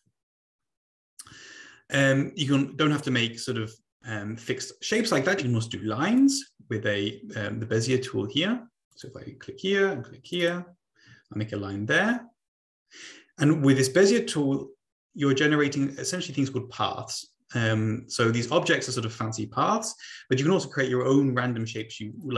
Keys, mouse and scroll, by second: 6.2 click, 8.9 click, 10.3 click, 10.4 click, 21.7 click, 22.1 click.